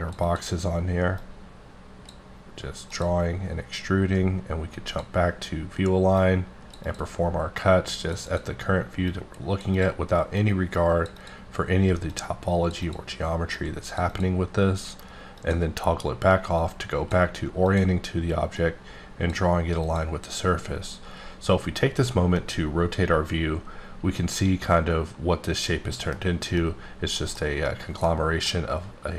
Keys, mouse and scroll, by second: 0.2 double click, 1.2 click, 2.8 click, 4.9 click, 5.1 click, 6.2 click, 6.8 double click, 7.6 click, 9.7 double click, 10.4 click, 11.1 double click, 12.1 click, 12.8 double click, 13.5 click, 14.1 double click, 15.4 click, 16.6 click, 17.7 click, 18.6 click, 19.8 click, 22.4-26.1 middle drag, 26.1 scroll up 2, 26.5 middle click, 27.6 middle click, 28.3 scroll up 1, 28.4 middle click.